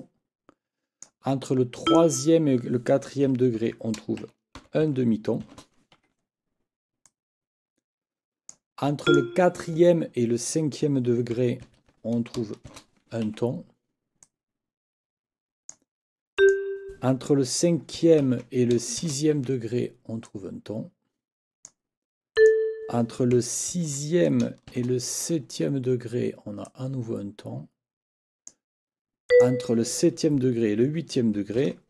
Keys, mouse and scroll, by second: 1.9 click, 3.6 ctrl+t, 5.4 shift+t, 5.9 shift+Escape, 7.1-8.7 drag, 9.1 click, 11.6 ctrl+t, 12.7 shift+t, 13.3 Escape, 14.2-15.9 drag, 16.4 click, 18.2 ctrl+t, 19.0 t, 19.3 shift+Escape, 20.3-21.9 drag, 22.3 click, 23.7 ctrl+t, 24.7 shift+t, 25.3 shift+Escape, 26.7-28.7 drag, 29.3 click, 31.6 ctrl+t.